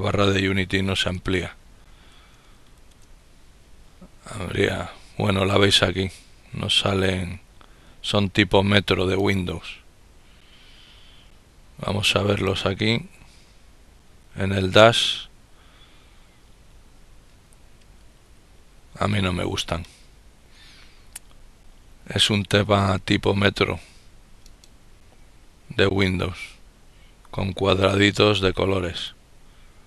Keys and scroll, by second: 1.5 ctrl+-, 1.6-3.0 typing, 4.7 typing.